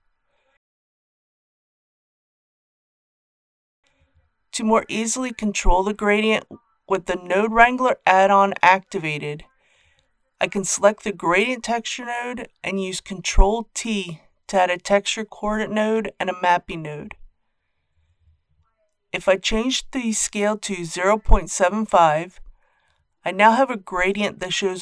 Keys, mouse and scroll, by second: 9.8 click, 13.2 ctrl+t, 19.2 click, 20.8 KP_Decimal, 21.0 KP_7, 21.2 KP_5.